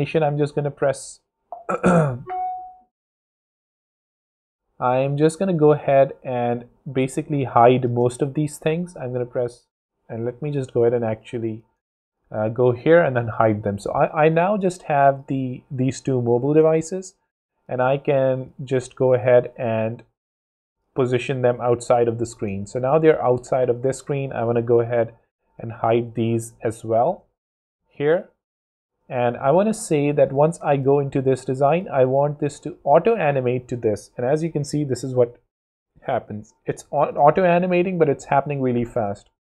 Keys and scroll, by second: 1.3 alt+l, 8.8 shift+0, 12.9 shift+0, 22.8 shift+space, 23.8 space, 24.3 0, 27.1 shift+0, 28.5 0, 34.5 w.